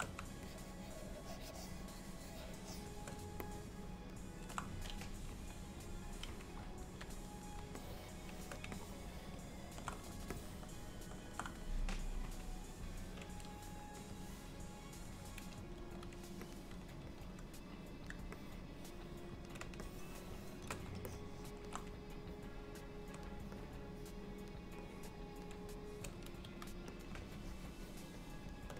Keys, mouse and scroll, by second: 0.5 shift+click, 3.5 middle click, 5.3 KP_1, 7.8 shift+middle click, 8.8 ctrl+middle click, 10.4 middle click, 12.3 KP_1, 14.2 click, 15.8 f, 17.3 click, 18.4 middle click, 19.9 shift+middle click, 21.1 ctrl+middle click, 22.4 click, 23.7 click, 25.0 click, 26.5 f, 27.3 shift+click, 27.9 shift+click, 28.6 shift+click.